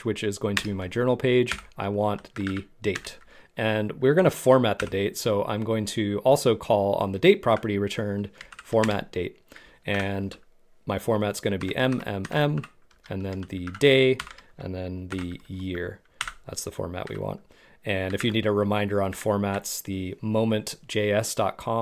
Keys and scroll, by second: 8.5 Down, 9.9 shift+', 11.6 shift+m, 12.9 BackSpace, 15.1 shift+y, 16.2 shift+', 17.1 Right, 18.3 super+Tab.